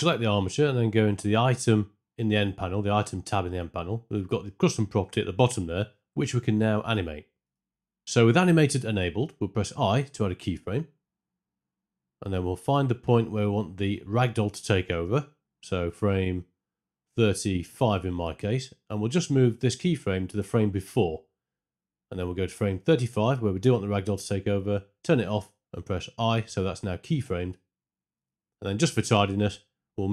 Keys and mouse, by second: 1.8 click, 13.9 Right, 14.3 Right, 14.8 Right, 15.2 Right, 16.7 Right, 16.7 Left, 18.5 click, 21.9 Right, 23.8 click.